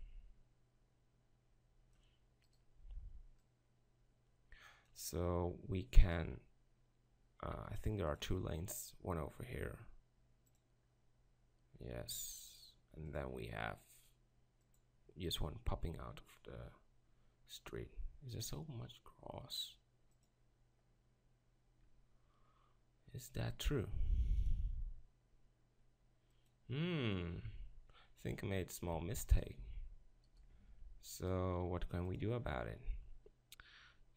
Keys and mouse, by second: 28.4 Tab, 29.0 Tab, 30.7 ctrl+r.